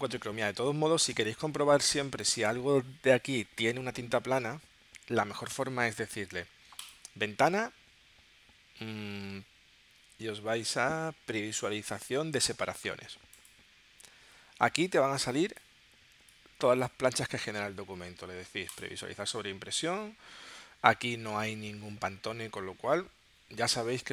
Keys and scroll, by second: 1.1 space.